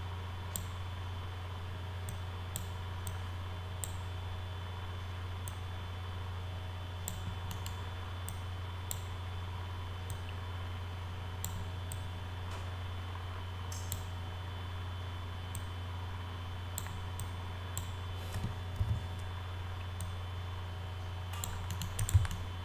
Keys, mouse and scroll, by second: 2.1 click, 3.1 click, 5.5-7.1 drag, 7.5 middle click, 8.3 click, 10.1-11.5 drag, 11.9-13.9 drag, 15.5-16.8 drag, 17.2 click, 18.8 r, 20.0-21.4 drag, 21.7 middle click, 22.0 click, 22.3-22.6 alt+middle drag.